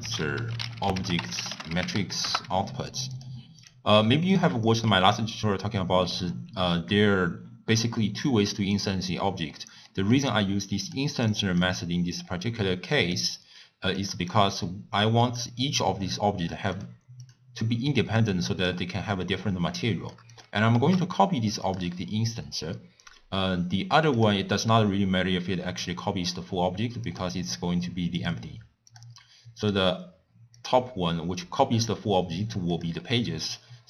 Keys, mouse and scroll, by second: 2.4 ctrl+a, 5.7-6.5 scroll up 4, 6.5-6.9 scroll down 2, 6.9-7.4 scroll up 4, 7.9 scroll up 1, 8.5 middle click, 9.0 scroll up 1, 9.8-13.4 middle drag, 13.4-14.6 drag, 15.3 click, 16.7 click, 17.2 click, 20.0-20.9 drag, 20.9 shift+d, 24.1 click, 27.1 click, 28.2-29.7 drag, 30.7-32.8 drag.